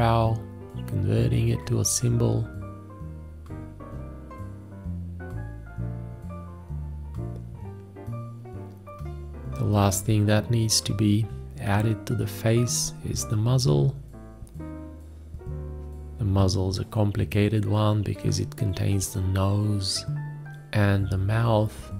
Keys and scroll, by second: 0.8 ctrl+Tab, 1.1 ctrl+s, 1.5 ctrl+Tab, 1.8-4.1 typing, 5.3 space, 8.3 space, 8.5 d, 9.1 v, 10.5 m, 11.7-12.8 typing, 17.2 ctrl+s, 17.2 ctrl+a, 17.3-20.6 typing, 18.2 ctrl+a, 18.6 ctrl+a, 19.1 ctrl+space.